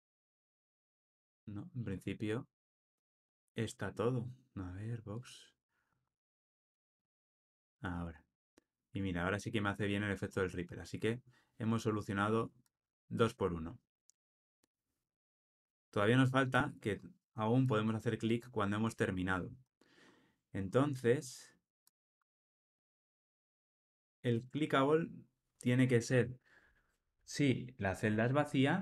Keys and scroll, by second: 0.2 shift+super+z.